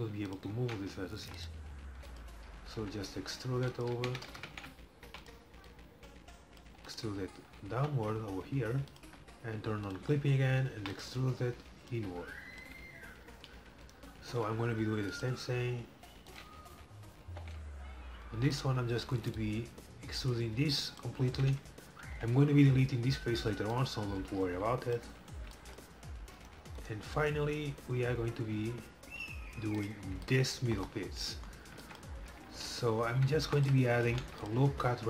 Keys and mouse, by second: 0.7 ctrl+z, 1.3 e, 2.8 g, 4.0 ctrl+z, 4.7 ctrl+z, 5.1 e, 5.8-7.5 drag, 6.8 e, 7.8 g, 10.0-11.6 drag, 10.8 e, 12.0-13.8 drag, 13.9-15.8 drag, 14.4 shift+d, 15.4 e, 17.3 ctrl+l, 18.4 e, 19.5-21.3 drag, 22.1 ctrl+l, 23.8-25.7 drag, 25.7-27.4 middle drag, 27.4-29.0 right drag, 28.5 shift+d, 29.0-30.1 middle drag, 30.1 right click, 34.1 ctrl+r.